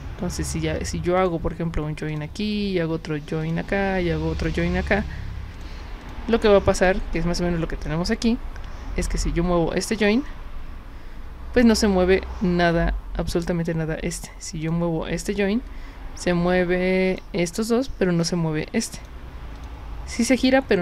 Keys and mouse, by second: 1.2 click, 2.1 click, 3.4 click, 4.4 click, 5.6 drag, 6.0 drag, 6.8 click, 9.0 w, 10.1-11.6 drag, 14.6 click, 15.4-17.2 drag, 19.0 click, 19.6 click.